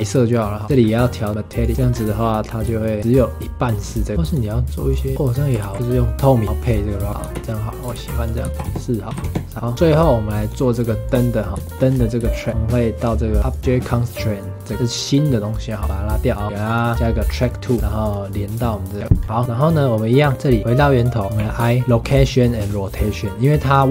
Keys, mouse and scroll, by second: 0.6 scroll up 1, 0.8-1.3 middle drag, 1.3-1.7 drag, 1.7 shift+middle click, 1.9 scroll up 2, 2.8-3.1 shift+middle drag, 3.1-5.1 drag, 5.1 scroll down 5, 5.6 ctrl+s, 7.1 scroll down 3, 7.2 space, 7.9 ctrl+s, 8.4 space, 8.5-9.5 drag, 9.5 ctrl+s, 9.6 shift+middle click, 10.4 click, 11.0 click, 11.5 ctrl+s, 11.6 shift+middle drag, 11.8-12.3 scroll up 2, 12.3 shift+middle click, 12.5 ctrl+s, 13.5 click, 15.8 click, 16.3-16.6 scroll down 1, 16.6-18.1 drag, 19.2 scroll down 5, 19.4-20.1 scroll up 2, 20.1 click, 20.4 ctrl+s, 20.9 click.